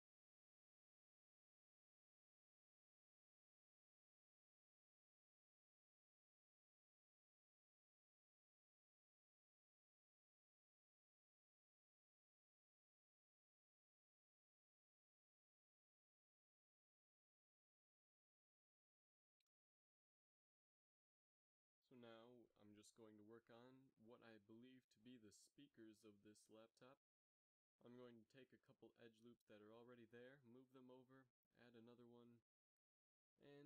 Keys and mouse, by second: 0.0-20.1 typing, 2.7 ctrl+l, 5.1 click, 5.3 ctrl+s, 7.5 ctrl+l, 9.2 ctrl+s, 11.3 ctrl+s, 12.3 ctrl+s, 13.9 ctrl+l, 15.3 ctrl+l, 19.8 ctrl+s, 21.7 click, 22.4 KP_7, 22.7 Tab, 23.9 z, 26.5 click, 27.3 g, 30.5 ctrl+r.